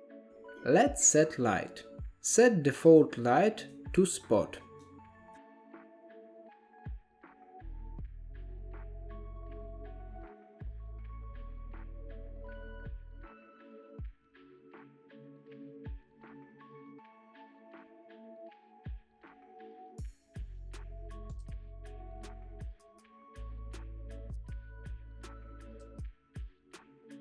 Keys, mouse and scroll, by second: 0.0-0.6 drag, 1.6 KP_7, 1.9-2.3 scroll down 2, 2.3-2.7 shift+middle drag, 2.7 scroll up 3, 3.0-4.2 shift+middle drag, 4.2 click, 5.3 click, 6.6 click, 7.3 KP_0, 8.5 scroll down 1, 8.6-9.3 middle drag, 9.3 KP_7, 9.7 g, 10.8-13.6 typing, 15.1 click, 15.7-17.0 drag, 18.2 KP_7, 19.1 g, 20.3 r, 21.2-21.9 drag, 21.9-22.7 middle drag, 22.7 KP_0, 23.9 click, 25.7-27.2 drag.